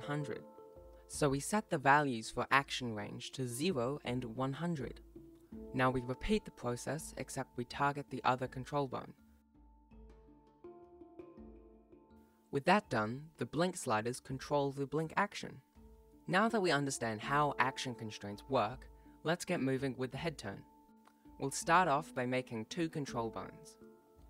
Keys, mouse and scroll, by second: 0.0 click, 1.2 click, 8.1 click, 8.1 right click, 8.1 g, 9.4 right click, 9.5 click, 9.6 click, 9.9 click, 9.9 right click, 10.0 click, 10.2 click, 10.2 ctrl+middle click, 10.4 click, 10.9 click, 11.1 scroll down 2, 11.3 click, 11.8 KP_0, 11.9 ctrl+s, 11.9 ctrl+middle click, 12.1 click, 12.3 click, 12.6 click, 12.9 right click, 13.0 g, 14.5 right click, 14.8 right click, 15.4 right click, 15.9 scroll down 2, 15.9 click, 15.9 right click, 15.9 g, 20.5 right click, 22.3 alt+g, 22.3 ctrl+s, 22.3 alt+a, 22.3 Tab, 22.5 right click, 23.0 right click, 23.0 g, 23.5 g, 23.7 g, 24.0 right click, 24.2 ctrl+z.